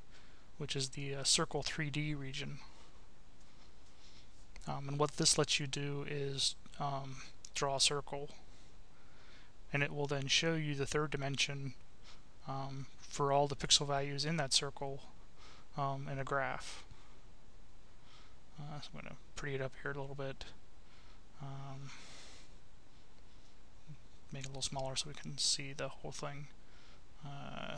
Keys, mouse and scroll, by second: 0.0 click, 0.5-2.3 drag, 4.2 click, 6.2 click, 9.3-11.2 drag, 13.5 click, 15.4 click, 16.5 click, 17.3 click, 19.2 click, 20.1 click, 21.0 click, 24.9 click, 26.9 right click.